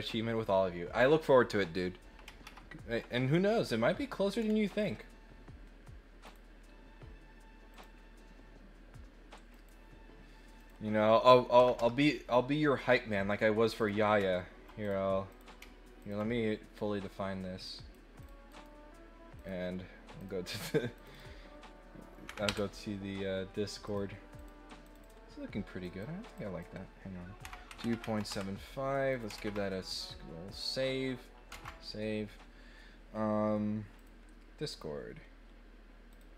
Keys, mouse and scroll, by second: 4.3 middle click, 4.7 scroll up 2, 6.2 click, 7.7 click, 9.5 click, 10.5 click, 13.8 click, 14.8 click, 15.3 click, 15.9 ctrl+middle click, 17.6 click, 18.2 click, 18.5 right click, 19.3 click, 20.1 click, 20.5 click, 20.9 click, 23.8 click, 24.3 click, 24.8 click, 25.8 click, 26.3 click, 29.1 click, 30.5 click, 33.9 click, 34.7 click, 36.1 click.